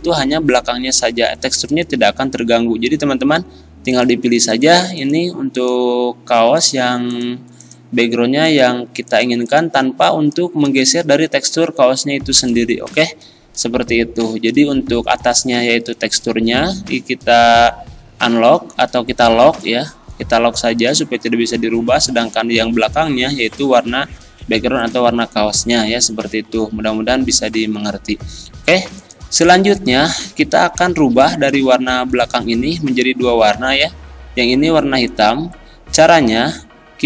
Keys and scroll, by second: 0.7 z, 2.2 ctrl+z, 10.8 ctrl+z, 32.1 ctrl+z.